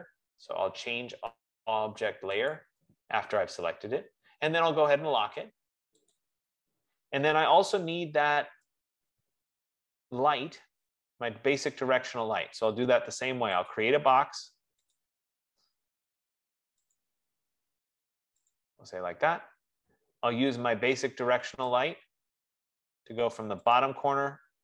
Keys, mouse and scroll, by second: 2.8 click, 6.4 click, 9.2 right click, 9.7 scroll, 14.1 click, 15.2 click, 17.2 click.